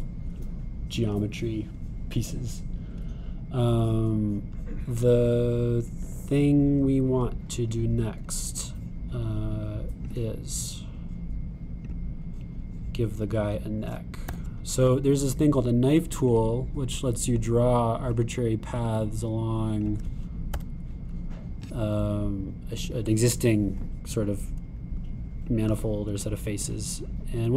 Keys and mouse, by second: 2.6-3.8 drag, 3.8-6.3 middle drag, 6.3-7.4 drag, 7.4-10.5 middle drag, 10.5-13.0 drag, 15.3 k, 23.9-26.6 drag.